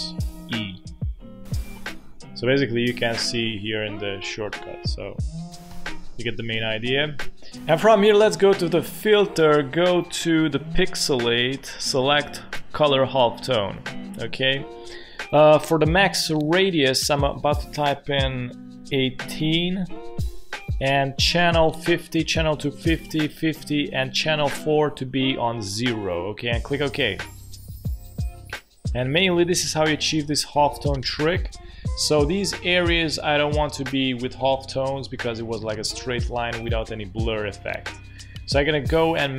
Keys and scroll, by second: 1.2 ctrl+alt+shift+e, 3.9 ctrl+alt+shift+e, 5.7 Delete, 18.7 1, 19.3 8, 31.4 space.